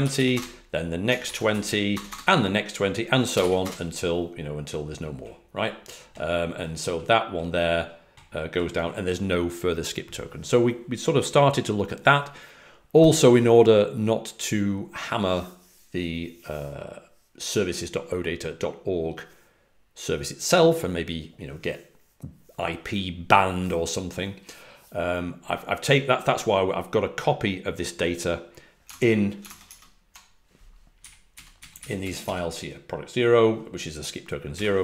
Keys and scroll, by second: 0.0-0.6 typing, 1.2 super+l, 1.8-3.8 typing, 29.4 super+Tab, 29.6 super+Tab, 31.7 Up, 31.9 Up, 32.1 Up.